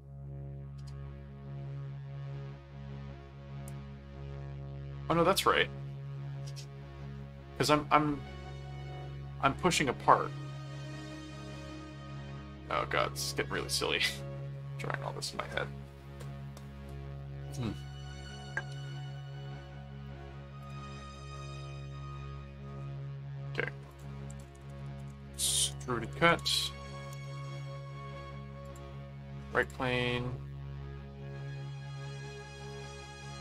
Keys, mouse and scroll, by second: 20.6 click, 21.9 ctrl+5, 22.7 ctrl+3, 23.1 ctrl+4, 23.9 click, 24.1-27.0 typing, 27.1 Return, 28.6 click, 29.6 click.